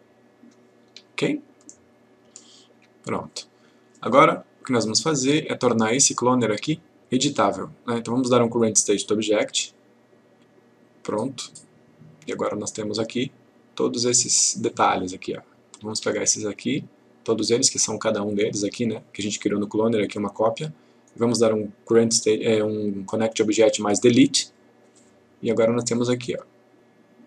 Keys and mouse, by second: 2.7 F1, 9.2 click, 13.0 click, 15.7 click, 16.4 shift+click, 21.1 right click, 24.5 click.